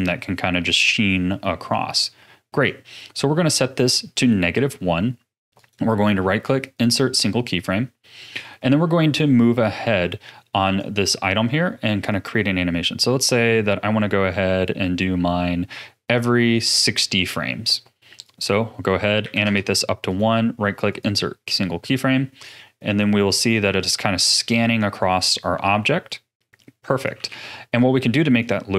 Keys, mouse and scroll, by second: 5.5-8.7 right drag, 12.1-15.2 drag, 18.2-20.0 drag, 20.0-21.9 right drag, 21.9-24.9 drag, 27.3 ctrl+s, 28.4-28.7 drag.